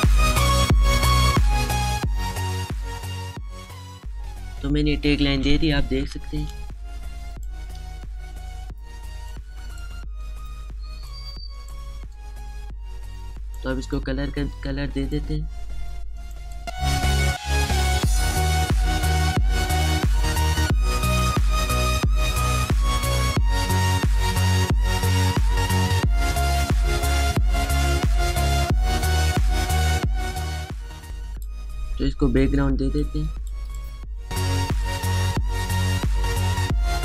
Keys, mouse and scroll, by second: 1.2 alt+scroll down 1, 1.8 space, 1.9 click, 2.7 alt+shift+click, 3.4 alt+scroll up 1, 3.8 click, 4.0 space, 4.2 click, 7.5 space, 7.7 click, 8.0 space, 10.5 click, 12.0 space, 12.2 click, 12.6 space, 13.8-28.3 drag, 28.7 space, 28.7 click, 32.2 space, 32.4 click, 32.4 space, 32.6 click, 33.4 alt+shift+click, 33.7 space, 33.9-36.2 drag, 36.3 right click.